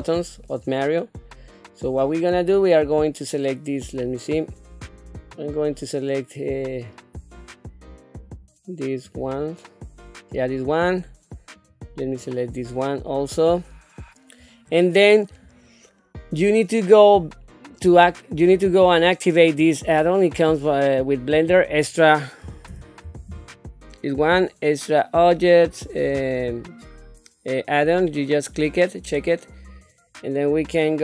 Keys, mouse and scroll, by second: 0.0 shift+middle click, 0.7 scroll up 1, 1.1 scroll down 1, 2.1 click, 4.9 click, 7.3 shift+click, 8.3 shift+click, 9.1 shift+click, 11.5 shift+click, 12.0 shift+click, 12.6 shift+click, 13.2 shift+click, 17.7-19.7 drag.